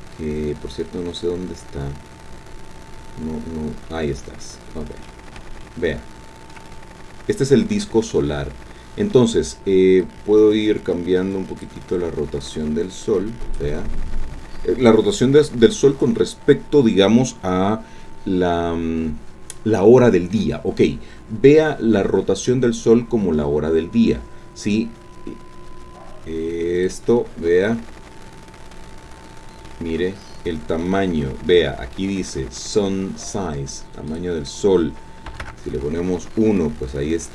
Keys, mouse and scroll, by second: 5.6-6.7 shift+drag, 10.0-11.8 drag, 12.4-13.7 drag, 24.7-27.0 drag, 28.0-28.7 scroll down 2, 28.7-29.9 drag, 29.9 middle click, 30.0-31.0 drag, 34.1 click, 35.3 KP_1, 35.4 KP_Enter, 36.6-37.3 drag.